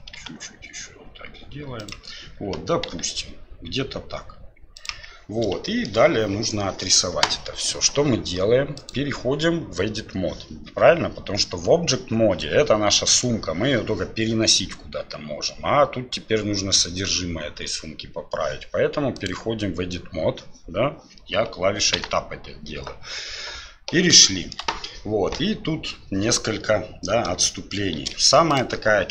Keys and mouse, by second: 5.6 shift+drag, 8.7-10.3 drag, 24.2 shift+click, 27.4 shift+click, 27.9 shift+d.